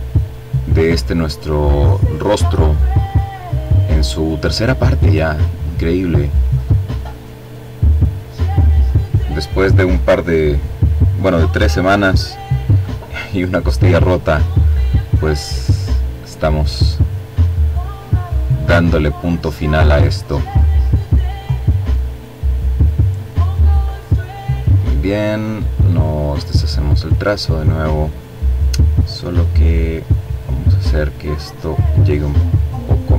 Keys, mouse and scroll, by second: 2.4-3.5 drag, 3.9 click, 5.6-6.8 drag, 12.8 click, 14.4-17.6 drag, 17.7 click, 19.2-21.5 drag, 22.7 click, 24.5 click, 28.5 click, 29.8-33.1 drag.